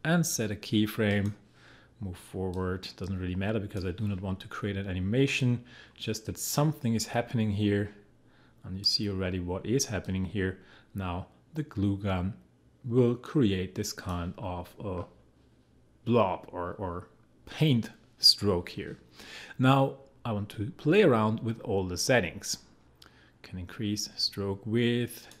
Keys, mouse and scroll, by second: 22.3-25.4 drag.